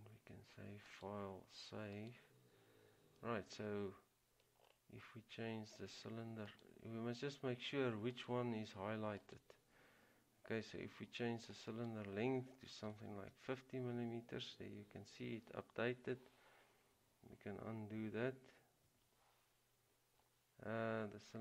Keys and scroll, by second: 12.8-13.6 typing, 19.1 ctrl+z.